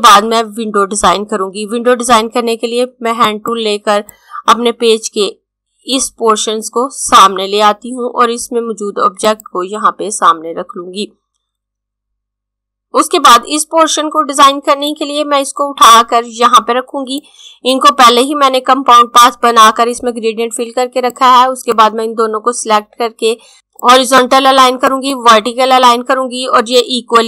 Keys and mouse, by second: 2.9 click, 14.9 click, 21.0 click, 23.9 click.